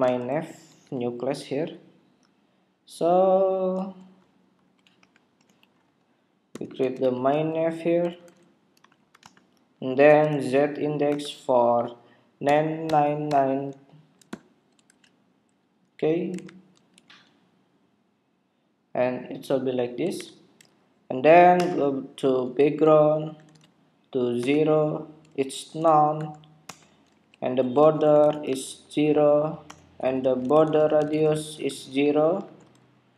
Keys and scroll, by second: 2.0 super+s, 4.6 super+=, 16.3 super+Tab, 17.0 super+r, 20.2 super+Tab.